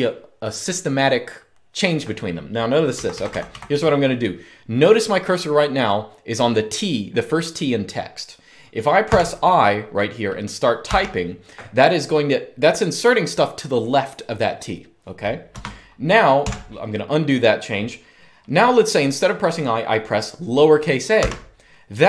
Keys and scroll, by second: 2.5-3.7 typing, 8.8 typing, 10.6 typing, 15.4 Escape, 16.2 u, 20.9 a.